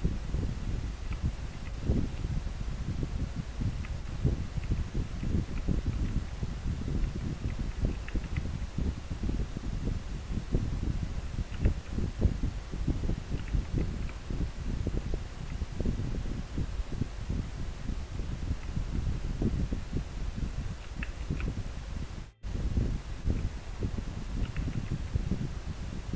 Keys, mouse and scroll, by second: 1.8 scroll up 1, 3.9 scroll down 1, 5.3 scroll up 1, 7.6 scroll up 1, 13.8 scroll up 1, 13.8 scroll down 1, 24.8 scroll down 1.